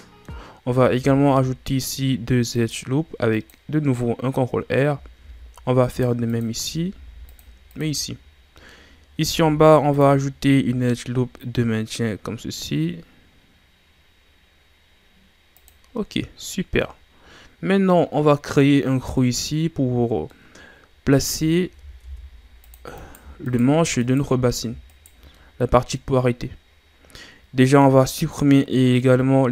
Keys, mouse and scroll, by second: 0.9 ctrl+r, 5.2 ctrl+r, 6.9 ctrl+r, 8.7-9.3 scroll up 1, 9.3 ctrl+r, 16.0-19.0 middle drag, 20.3-21.5 middle drag, 21.5-22.0 scroll up 3, 22.0 ctrl+Tab, 23.0 right click, 23.4 shift+right click, 24.0 shift+right click, 24.9 shift+right click, 25.3-29.5 middle drag.